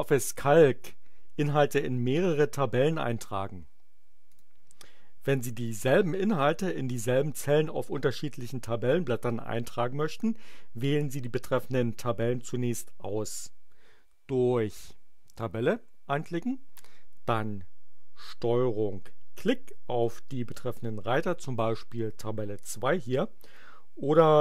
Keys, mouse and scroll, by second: 4.3 click, 20.0 ctrl+click.